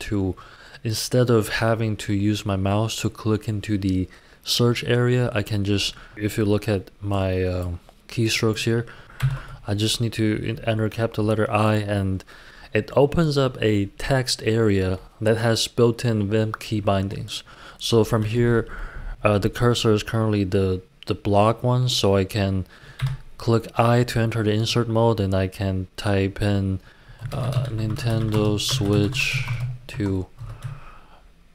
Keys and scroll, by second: 9.1 shift+i, 22.9 typing, 27.0-30.3 typing, 30.4 Escape.